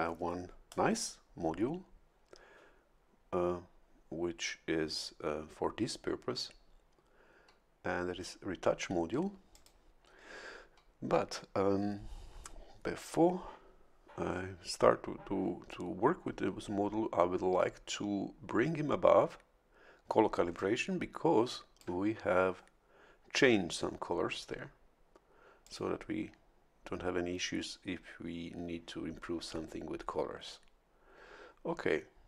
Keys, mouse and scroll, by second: 9.5 click, 20.5-22.0 ctrl+shift+drag, 25.6 click.